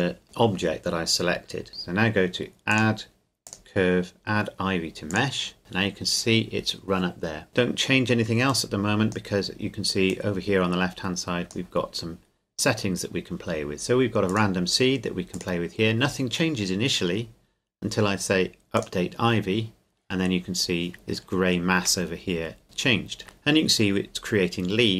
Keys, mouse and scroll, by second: 2.7 click, 8.5 click, 14.3 click, 18.7 click, 20.9 shift+middle click, 22.1-22.4 scroll up 1, 22.8 shift+middle click.